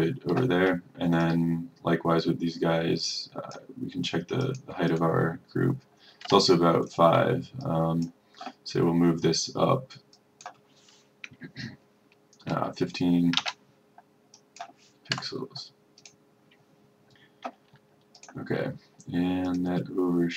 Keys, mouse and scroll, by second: 13.5 KP_5, 14.4 click, 15.2 KP_0, 16.1 click.